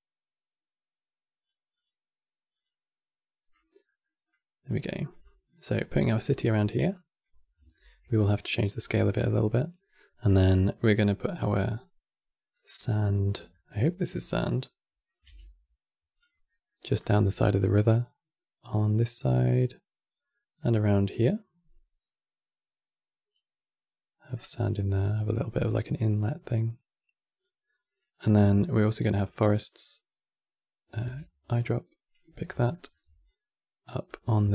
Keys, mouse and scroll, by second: 3.3 scroll down 1, 3.5 middle click, 4.0-7.2 drag, 7.2 scroll down 2, 7.4 shift+middle click, 7.9 click, 8.5 scroll down 2, 8.7-11.1 shift+middle drag, 11.1 e, 12.9-13.2 scroll up 2, 13.2-14.9 shift+middle drag, 14.9 f, 16.2-17.7 middle drag, 17.7-22.9 drag, 24.7-27.7 drag, 30.7 e, 32.4 shift+middle click, 33.0-34.1 drag, 34.1 f.